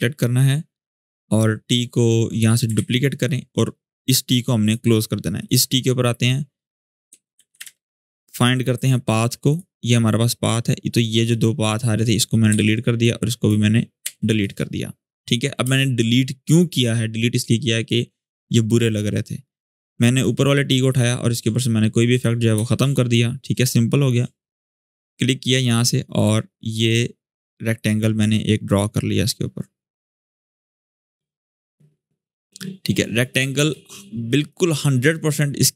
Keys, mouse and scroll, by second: 2.4 click, 2.5 ctrl+d, 4.4 click, 6.8 ctrl+f, 7.0-7.9 typing, 9.2 click, 10.2-11.0 scroll up 1, 11.0-11.6 drag, 12.8-13.4 drag, 14.8-15.2 scroll down 1, 15.4 space, 15.5-16.1 click, 15.9 space, 19.9 click, 23.2-23.6 scroll up 1, 24.8-29.7 drag, 30.5-31.1 drag, 33.3 v, 33.8-34.3 click, 34.5-35.7 drag.